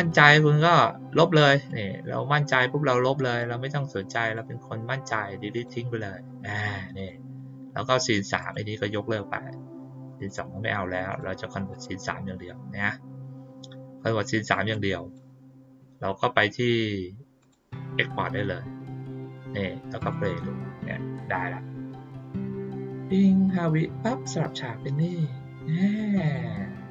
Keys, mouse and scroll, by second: 1.6-3.3 drag, 4.2 right click, 5.5 click, 6.4 click, 6.9 click, 8.3 click, 10.0 click, 10.2 click, 11.0 click, 11.7 click, 14.7-15.1 drag, 17.3 click, 19.9 click.